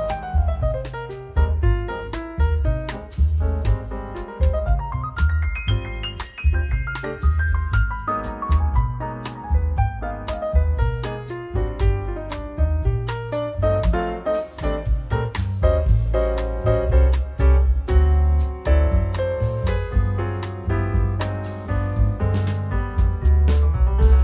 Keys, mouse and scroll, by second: 2.1-2.5 scroll down 1, 2.5-4.4 drag, 4.7 0, 5.4 scroll down 1, 6.5-7.0 scroll up 2, 7.5 scroll down 1, 8.1 scroll up 1, 9.3-11.3 drag, 12.8 click, 13.4-14.5 drag, 14.6-15.9 right drag, 15.9 click, 16.7 click, 17.3-22.2 drag.